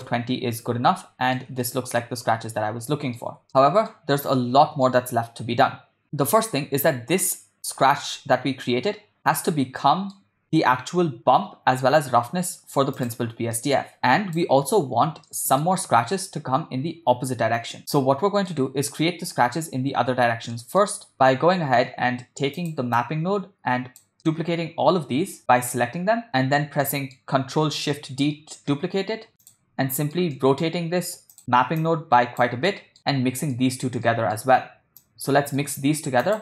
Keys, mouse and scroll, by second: 1.1 ctrl+middle click, 1.7-2.0 shift+middle drag, 3.0 ctrl+middle click, 3.6 middle click, 4.4-4.9 middle drag, 6.4 shift+middle click, 9.3 middle click, 13.0 click, 13.6 middle click, 14.0 click, 15.3 shift+middle click, 17.8 middle click, 20.5 middle click, 21.1 middle click, 22.6 click, 23.0-24.0 drag, 25.4 middle click, 25.5 click, 26.3 ctrl+middle click, 26.9 middle click, 28.2 ctrl+shift+d, 30.0 ctrl+middle click, 30.4 middle click, 31.4 click, 31.8 click, 32.7 middle click, 33.5 ctrl+middle click, 34.1 middle click, 35.0 click, 35.6 middle click, 36.1 shift+a.